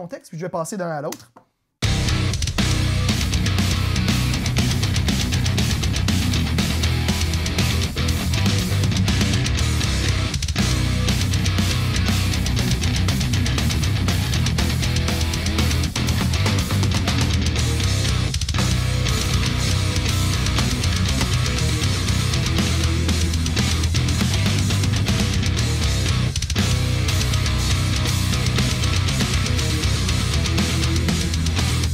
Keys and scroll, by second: 1.6 space.